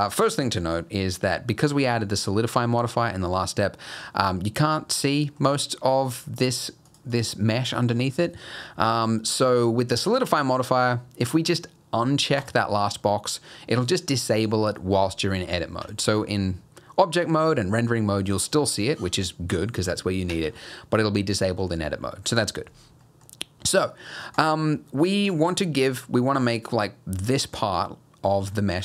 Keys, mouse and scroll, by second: 3.8-4.4 scroll up 1, 4.4 middle click, 4.7 middle click, 6.1 click, 6.6 click, 6.9 click, 7.1 click, 12.4 click, 13.5 middle click, 15.8 Tab, 20.3 Tab, 23.0 middle click, 23.3-23.6 scroll up 1, 23.6 middle click, 24.3 click, 25.9 click.